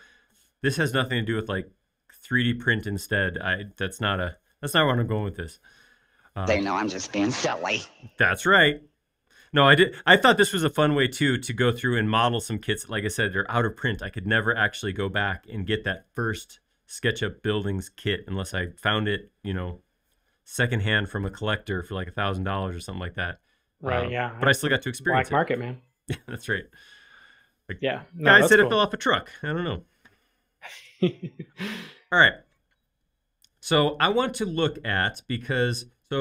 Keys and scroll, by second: 35.1 m.